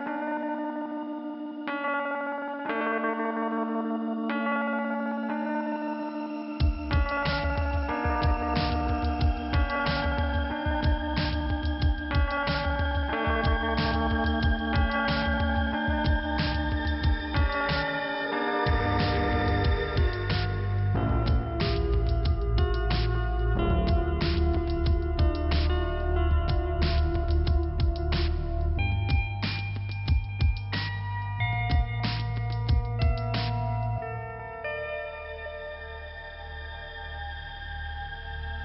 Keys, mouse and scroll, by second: 0.5 click, 5.6 click, 8.3 click, 9.2 click, 10.4 scroll down 1, 14.3 click, 17.0 click, 22.0 click, 25.5 click, 26.0 click, 26.1 double click, 26.5 double click, 28.2 click, 30.4 click, 33.6 click, 34.8 click, 36.2 click.